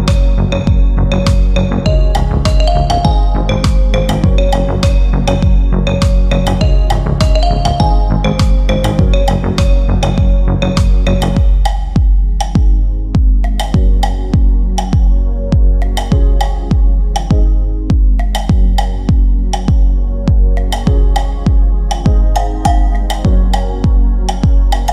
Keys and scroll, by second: 3.4 Delete, 6.9 ctrl+z, 14.9 c, 16.1 ctrl+Page_Down.